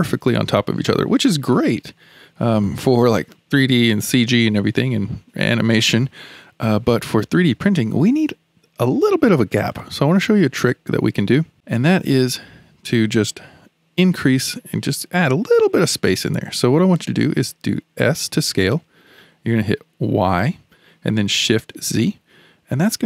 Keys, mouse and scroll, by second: 1.2-1.5 scroll down 2, 1.5-5.7 shift+middle drag, 5.7-6.0 scroll down 2, 6.0-9.1 shift+middle drag, 9.7-11.5 shift+middle drag, 18.0 s.